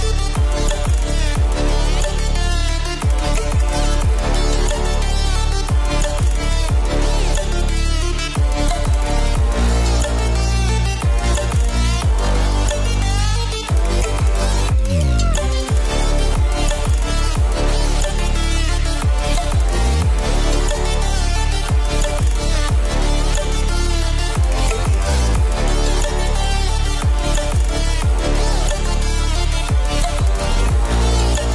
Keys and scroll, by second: 1.5 Return, 2.4 shift+Right, 3.6 shift+Up, 3.8 shift+Right, 4.1 shift+Down, 4.8 shift+Left, 6.8 ctrl+0, 9.1 ctrl+space, 11.1 ctrl+z, 11.7 ctrl+space, 14.5 ctrl+space, 19.0 space, 20.0 space, 21.3 space, 22.9-27.4 typing, 23.9 ctrl+z, 24.2 ctrl+z, 24.5 ctrl+z, 25.8 ctrl+z, 28.2 ctrl+space, 29.1 space, 29.4 space, 30.1 ctrl+z, 31.0-31.5 typing.